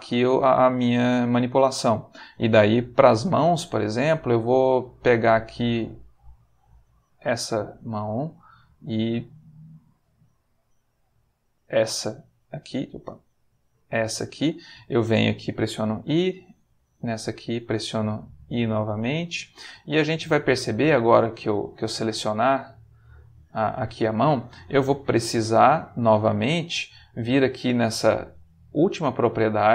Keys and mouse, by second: 3.2-7.0 drag, 8.0 click, 9.0-11.9 drag, 12.7 click, 15.8 i, 17.1 click, 18.3 i, 20.9 click, 21.7 click, 22.5-23.9 middle drag, 25.4 click, 25.9 middle click, 27.1 middle click, 29.2 click.